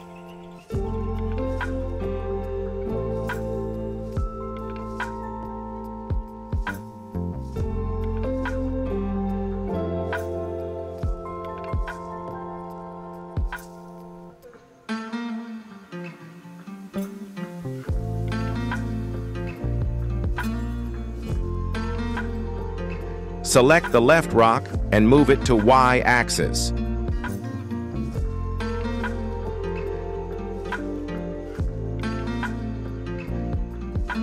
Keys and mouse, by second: 0.8 r, 3.5 g, 4.7 x, 4.8 x, 4.9 x, 5.2 KP_1, 7.1 g, 9.1 shift+middle click, 9.8 g, 10.7 x, 10.7 x, 10.9-11.3 middle drag, 11.9 shift+middle drag, 13.2 g, 14.9 y, 15.0 y, 16.7 g, 17.7 y, 17.8 y, 18.3 KP_1, 20.0-21.1 middle drag, 21.4 shift+middle drag, 22.9 KP_1, 25.2 r, 28.0 g, 31.5 x, 31.5 x, 32.2 shift+middle drag, 33.0-34.1 middle drag.